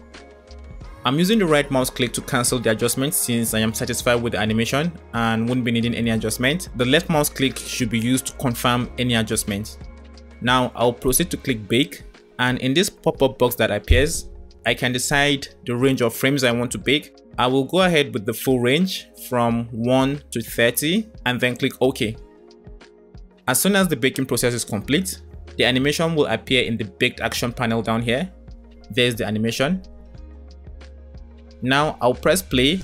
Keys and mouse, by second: 0.9 click, 4.0 space, 6.0 space, 11.9-22.3 drag.